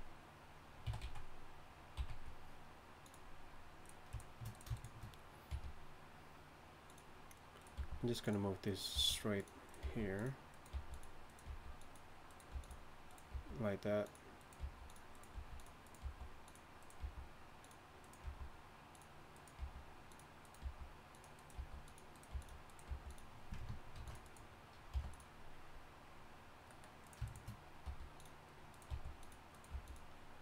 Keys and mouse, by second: 0.8 s, 5.5 g, 7.7 g, 8.9 g, 9.8 g, 10.7 g, 11.5 g, 12.5 g, 13.3 g, 14.6 g, 15.3 g, 16.0 g, 17.0 g, 18.2 g, 19.6 g, 20.6 g, 21.5 g, 22.3 g, 22.9 g, 23.9 ctrl+r, 24.9 g, 27.0-28.1 drag, 27.8 g, 28.7 click, 28.9 g, 29.7 g.